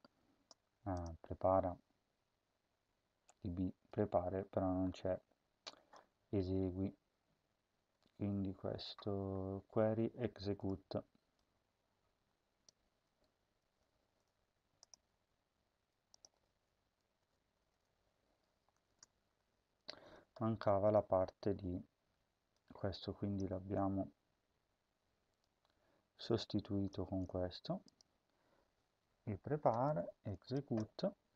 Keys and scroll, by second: 13.6 ctrl+c, 17.0 Return, 17.4 ctrl+v, 18.8 <, 23.4 ctrl+c, 26.8 ctrl+v, 30.6 BackSpace.